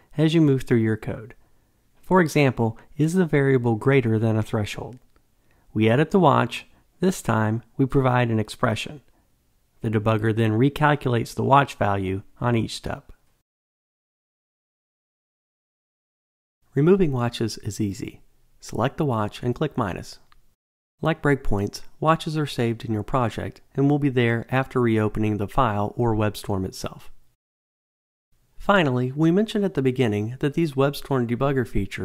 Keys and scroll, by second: 6.6 F2, 11.7 F8, 18.5 Delete.